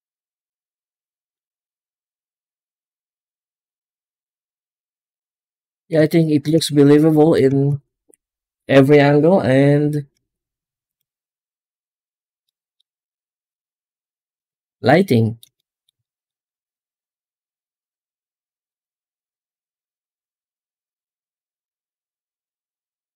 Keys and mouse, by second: 1.7 middle drag, 2.6 middle drag, 3.7-4.0 middle drag, 4.9 z, 5.9-6.2 shift+middle drag, 6.5-7.2 middle drag, 7.5 ctrl+s, 10.0 z, 12.3-12.7 middle drag, 13.3 z, 14.7-15.2 middle drag, 15.4 middle click, 15.8 shift+middle click, 16.3-16.8 ctrl+middle drag, 17.0-17.7 shift+middle drag, 17.9 z, 21.7 z.